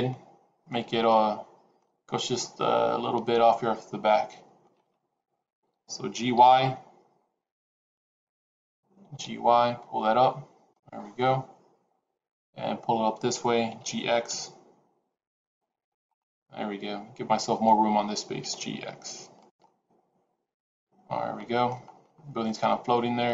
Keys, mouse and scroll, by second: 6.3 y, 6.3 t, 7.9 click, 8.9 g, 13.6 g, 16.0 middle click, 18.3 g, 19.5 middle click, 21.7-22.3 scroll up 5, 22.3 middle click.